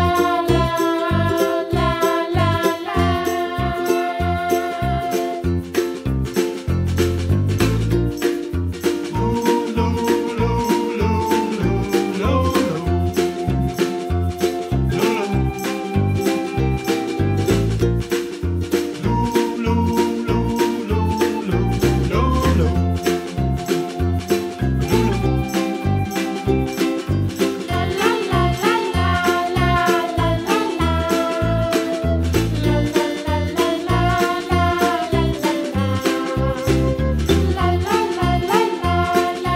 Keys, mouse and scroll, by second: 1.2 click, 1.6 Tab, 1.8 click, 2.1 middle click, 2.8 g, 3.6-5.5 right drag, 5.5 shift+d, 7.9 r, 8.9 s, 10.4-11.3 middle drag, 11.3 g, 12.9 g, 14.1 s, 14.7-15.3 middle drag, 15.3-15.9 scroll up 3, 15.9-17.2 middle drag, 17.6 s, 19.4 scroll up 1, 19.5-19.8 middle drag, 19.8 scroll down 1, 20.0-21.0 middle drag, 21.0 scroll down 1, 21.2-21.6 middle drag, 21.6 shift+click, 22.0 click, 22.5 shift+d, 23.9 middle click, 24.5 s, 25.4 g, 26.9 g, 28.1-29.3 middle drag, 29.5 s, 30.9 g, 31.8 g, 32.6-33.8 middle drag, 34.0 s, 35.9 KP_Decimal, 36.2 scroll down 1, 36.3-37.2 middle drag, 37.2-37.8 scroll down 4, 37.8 shift+d.